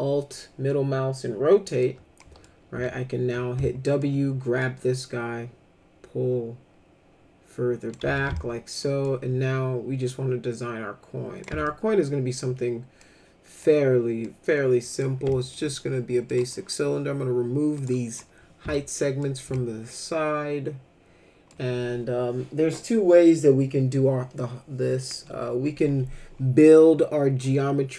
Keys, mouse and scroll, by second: 2.2 middle click, 2.7 w, 3.6 alt+middle click, 4.6-7.9 drag, 8.0 z, 8.4 alt+middle click, 10.1-11.4 drag, 11.6 alt+middle click, 13.0 click, 14.2 click, 15.3 alt+middle click, 16.3 click, 17.8 right click, 18.7 alt+middle click, 19.5-21.5 alt+middle drag, 27.4-27.9 drag.